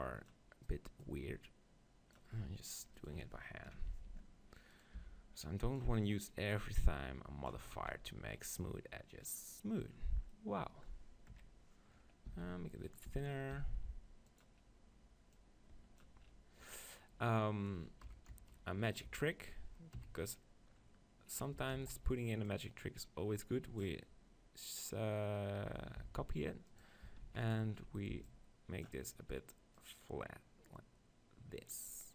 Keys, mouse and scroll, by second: 1.1-3.0 drag, 5.0 b, 6.4 right click, 6.6 click, 7.6 Tab, 7.8 z, 9.9 click, 10.8 click, 11.4 KP_3, 12.3 s, 13.0-14.7 right drag, 13.1 s, 14.4-17.4 drag, 18.1-20.0 typing, 20.8 click, 21.9-23.7 right drag, 21.9 shift+d, 22.5-23.7 drag, 23.8 click, 26.0 s, 26.8 right click, 27.1 Tab, 27.3 z, 28.1 b, 29.8-31.7 drag.